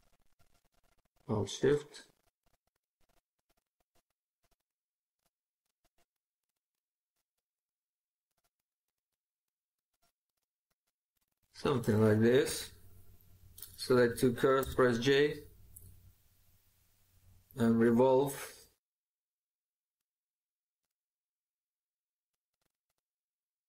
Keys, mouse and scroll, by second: 1.3 ctrl+click, 11.0 right click, 14.5 j, 23.1 right click.